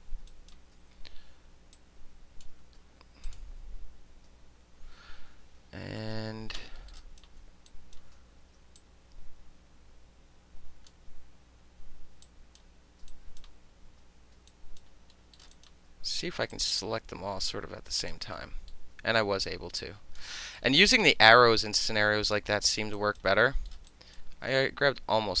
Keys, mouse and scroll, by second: 0.3 alt+right click, 1.7 click, 2.6 ctrl+z, 3.2 click, 5.7-6.8 alt+middle drag, 6.9 alt+middle click, 7.0 alt+right click, 7.0 alt+click, 7.2 alt+middle click, 7.7 alt+click, 7.9-8.7 alt+middle drag, 8.8-10.9 shift+drag, 12.2-12.6 shift+drag, 13.1 alt+right click, 14.5 alt+right click, 14.8 alt+middle click, 15.3 alt+middle click, 15.5 alt+click, 15.6 alt+middle click, 16.5-18.1 alt+drag, 18.1 alt+middle click, 18.7-19.8 alt+middle drag, 19.8 click, 20.2 alt+middle click, 20.6-22.5 alt+middle drag, 22.8 alt+middle click, 22.9 alt+right click, 23.7-25.4 alt+middle drag, 23.9 alt+right click.